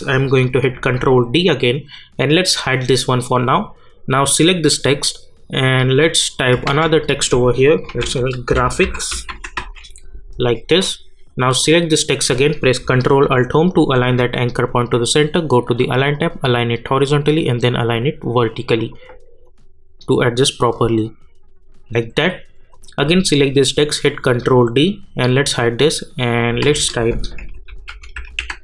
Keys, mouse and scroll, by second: 0.7 ctrl+d, 2.6 click, 6.4 click, 6.7 ctrl+a, 7.6-10.0 typing, 10.8 click, 13.7 ctrl+alt+Home, 16.1 click, 24.2 ctrl+d, 25.4 click, 26.6 ctrl+a, 27.1-28.6 typing.